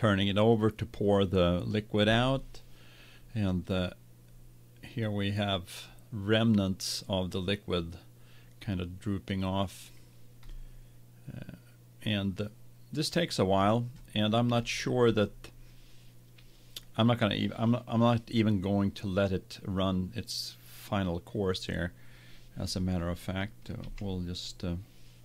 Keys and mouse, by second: 10.6 middle click, 24.2 z.